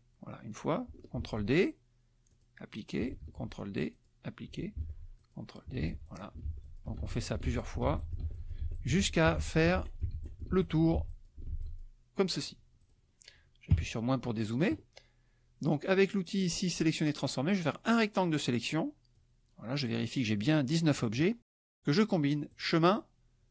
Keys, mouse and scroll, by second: 1.2 ctrl+d, 2.3 click, 3.2 ctrl+d, 3.9 click, 4.7 ctrl+d, 5.2 ctrl+click, 5.8 ctrl+d, 6.0 ctrl+click, 6.6 ctrl+click, 7.1 ctrl+click, 7.5 ctrl+click, 8.0 ctrl+click, 8.7 ctrl+click, 10.2 ctrl+click, 11.0 ctrl+click, 11.6 ctrl+click, 12.8 click, 13.7 KP_Subtract, 17.8-19.3 drag, 22.5 click.